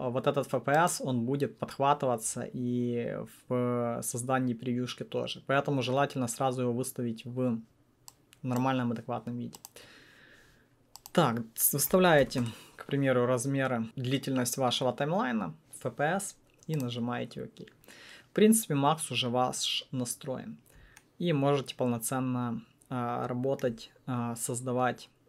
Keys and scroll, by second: 11.6-12.7 typing.